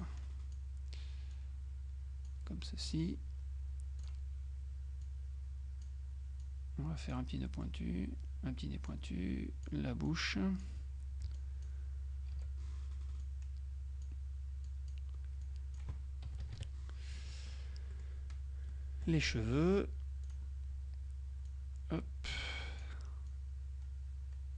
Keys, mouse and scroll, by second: 0.1 click, 1.4 click, 2.8 right click, 4.1 click, 5.1-6.4 drag, 6.5 click, 7.5 right click, 9.0 click, 11.4 F2, 11.4 click, 12.4 Delete, 13.3 click, 14.8 click, 16.5 KP_Subtract, 18.0 middle click, 18.8-20.4 middle drag, 20.4 click, 21.6-23.4 drag.